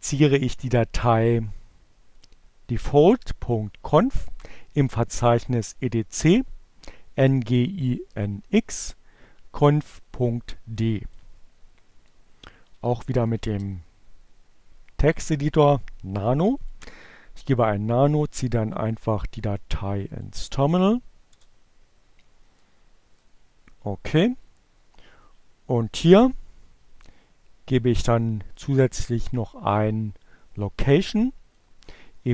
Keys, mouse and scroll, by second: 1.1 click, 10.4 click, 10.6-12.5 typing, 14.0-16.1 drag, 18.6 click, 19.3 click, 19.9 Return, 21.2 Page_Down, 22.6 Down, 23.6 Up, 29.0 Right, 31.2 Left.